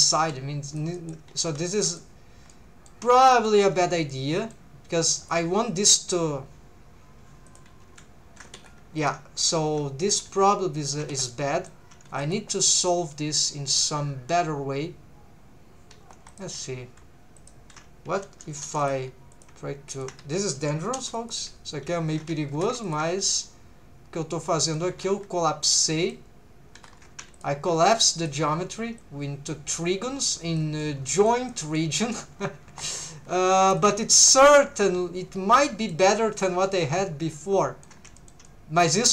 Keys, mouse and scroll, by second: 0.2 g, 0.7 shift+click, 0.9 middle click, 1.3 ctrl+z, 1.8 middle click, 2.5 middle click, 3.2 middle click, 3.7 1, 4.1 middle click, 5.2 click, 7.5 click, 7.8 r, 8.5 Escape, 9.0 click, 9.4 g, 9.9 click, 10.3 shift+v, 11.1 Escape, 11.3 middle click, 12.1 2, 12.2 click, 12.5 middle click, 13.1 shift+middle click, 13.6-14.2 scroll down 1, 16.3 click, 17.4 shift+click, 19.3 click, 20.9 m, 21.7 scroll down 2, 22.2 alt+a, 22.5 3, 22.8 alt+shift+click, 23.2 scroll down 1, 23.3-24.8 middle drag, 23.3 scroll up 1, 24.9 alt+a, 25.6 middle click, 27.4 alt+shift+click, 28.0 alt+a, 28.2 alt+shift+right click, 28.2 alt+shift+click, 29.0 right click, 29.0 click, 30.8 middle click, 31.5 shift+middle click, 31.8 middle click, 32.3 scroll up 1, 32.7 1, 32.9 click, 33.3 shift+v, 33.8 shift+click, 34.4-36.0 middle drag, 37.4 middle click, 38.2 shift+middle click, 38.4 middle click.